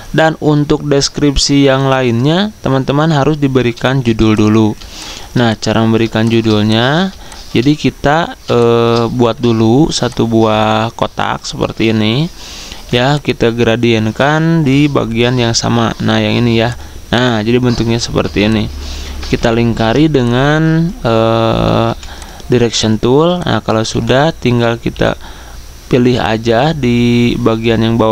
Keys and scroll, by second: 4.0 z, 4.8 z, 15.3 i.